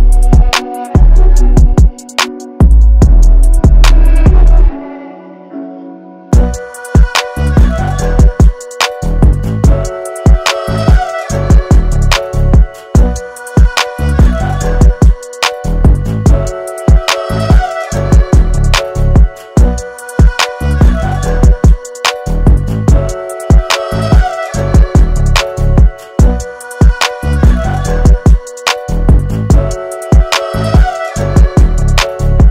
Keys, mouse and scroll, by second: 0.9 Caps_Lock, 2.3 space, 2.4 click, 2.8 space, 3.6 click, 8.4 space, 8.5-10.8 drag, 10.8 shift+x, 11.5 alt+scroll down 1, 12.8 Caps_Lock, 13.7 click, 16.1 ctrl+d, 17.0 alt+scroll up 1, 17.5 space, 17.6 click, 18.5 scroll up 1, 19.3 alt+scroll up 1, 20.3 alt+scroll up 1, 20.8 alt+scroll up 1, 21.3 space, 21.4 click, 23.6 b, 24.5 right click, 25.2 click, 27.4 click.